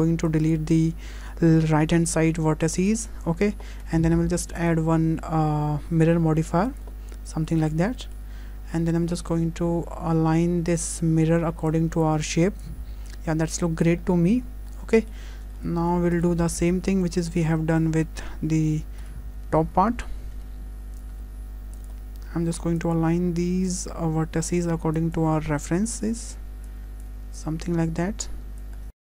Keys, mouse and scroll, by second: 0.3 click, 13.8 click, 14.1 scroll down 2, 14.8 Tab, 14.8 click, 14.8 scroll down 2, 15.0 shift+middle click, 15.3 click, 15.3 scroll down 3, 15.6 shift+middle click, 24.5 click, 25.0 click, 26.3 click, 26.7 click, 28.6 click, 28.8 scroll down 2, 28.9 click, 29.0 click.